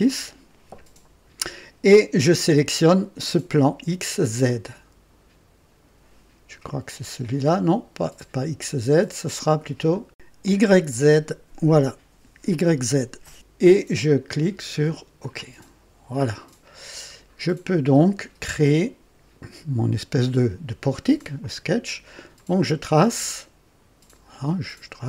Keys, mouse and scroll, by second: 9.8 click, 15.1 click, 16.7-17.1 scroll up 2, 17.3 scroll down 1, 17.9-18.7 right drag, 22.3 click, 24.2 click.